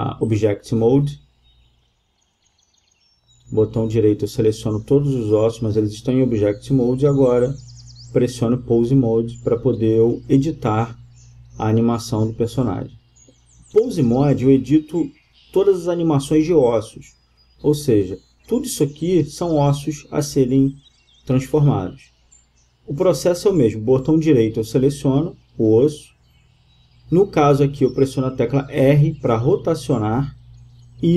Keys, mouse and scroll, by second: 2.5-7.8 drag, 11.5-13.0 drag, 13.5-15.1 drag, 16.4 r, 19.9-20.9 right drag, 20.3 r, 24.0-25.4 drag, 24.9 r, 25.4 right click, 26.9 r.